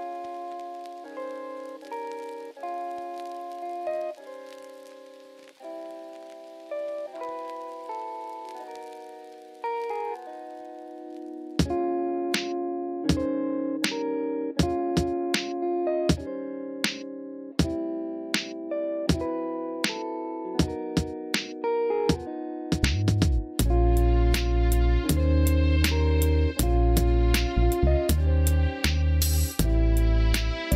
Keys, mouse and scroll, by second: 0.0 click, 1.0 click, 1.6 click, 1.7 Tab, 2.4 KP_3, 3.8 alt+z, 4.0-5.9 drag, 6.7 s, 6.9 z, 7.2 KP_0, 7.9 click, 9.0-11.0 drag, 13.7-17.5 drag, 18.5 click, 19.1 click, 20.0 Tab, 20.3 Tab, 21.9 alt+shift+click, 22.4 middle click, 26.2 click, 29.5 middle click.